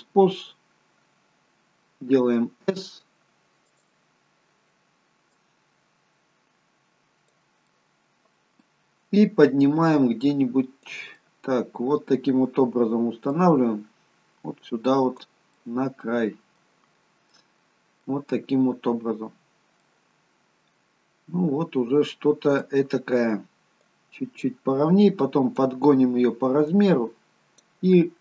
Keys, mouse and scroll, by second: 2.0 s, 5.4 click, 7.7 middle click, 9.7 click, 11.1 middle click, 13.3 click, 15.6 middle click, 16.8-17.4 scroll up 1, 17.4 middle click, 17.4-18.5 scroll up 2, 18.9-19.9 scroll down 2, 19.9 middle click, 23.8 click, 26.7 click.